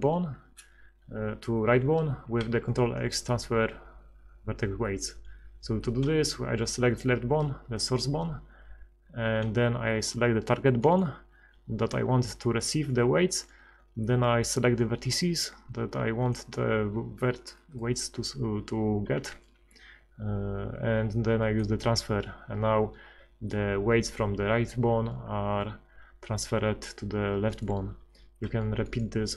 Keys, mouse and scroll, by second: 2.4 ctrl+x, 17.7 middle click, 19.2 ctrl+x.